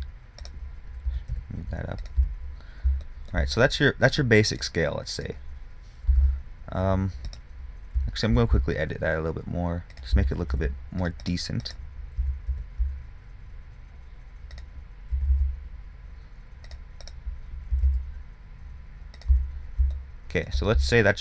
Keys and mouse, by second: 0.2 Tab, 1.3 g, 2.5 Tab, 6.4 Tab, 8.3 g, 10.9 ctrl+r, 11.9 click, 12.5 g, 15.4 g, 17.3-19.6 drag, 18.0 g, 19.6 Tab, 20.5 click.